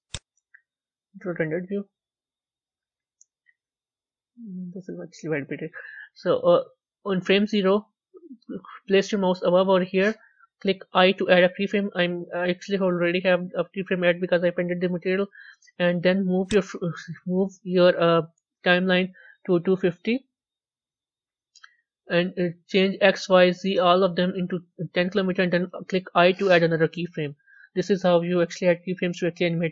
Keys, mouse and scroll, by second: 0.0-1.1 drag, 1.1 z, 2.1 a, 2.4-2.9 scroll up 3, 3.3 scroll up 1, 4.0-16.4 middle drag, 16.4-19.5 drag.